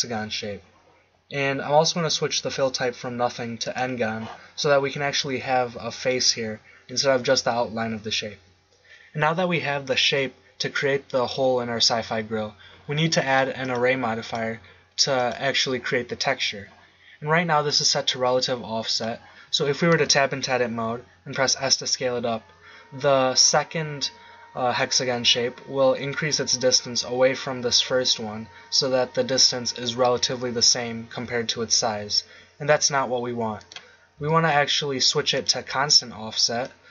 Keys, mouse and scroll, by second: 2.3-4.3 drag, 13.6-15.3 drag, 16.1-17.6 middle drag, 19.3 middle click, 20.0 Tab, 21.6 s, 33.7 click, 34.1 Tab.